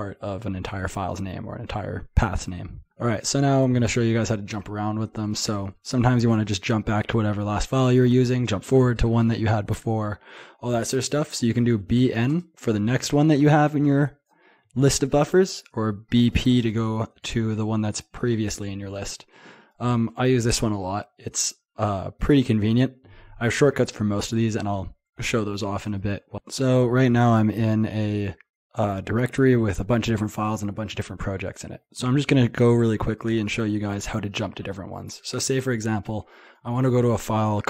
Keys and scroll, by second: 5.4 typing, 11.6-12.6 typing, 15.6 typing, 26.3 typing.